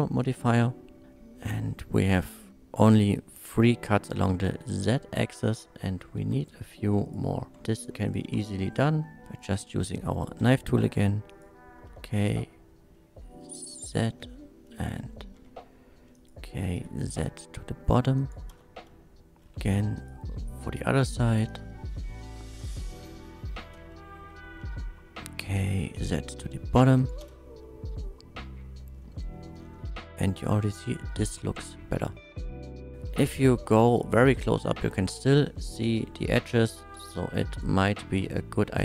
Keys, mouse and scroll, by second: 0.5 click, 2.4 Tab, 6.4 click, 7.0 Tab, 7.0 click, 7.6 Tab, 7.8 click, 8.1 click, 8.7 Tab, 8.7 shift+middle click, 9.2 middle click, 10.4 k, 11.3 click, 12.3 z, 13.7 click, 14.1 space, 15.4 k, 16.1 click, 16.8 z, 18.2 click, 18.5 space, 19.5 k, 20.0 click, 21.0 z, 21.5 click, 23.6-26.0 typing, 25.4 click, 27.0 click, 27.2 space, 29.9 Tab, 30.1-30.6 middle drag, 31.1-32.3 middle drag, 32.5 Tab, 33.1 middle drag, 35.5 middle drag, 36.6 middle click, 37.2 Tab, 37.5 click.